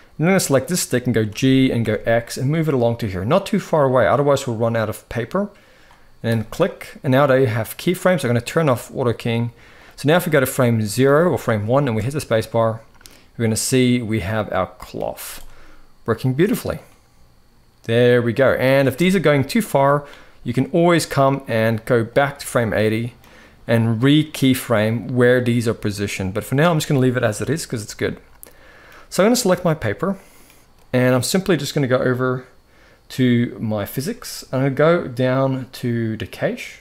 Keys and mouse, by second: 1.0 g, 8.2 click, 9.5-10.7 drag, 11.6 space, 14.2-14.7 middle drag, 14.9 z, 16.6-18.4 middle drag, 18.5 space, 18.9 click, 21.5-22.9 drag, 24.3-27.8 drag, 27.8-28.5 middle drag, 28.3 click, 29.1 click, 29.5-30.0 middle drag, 30.6-31.3 middle drag, 36.0 click.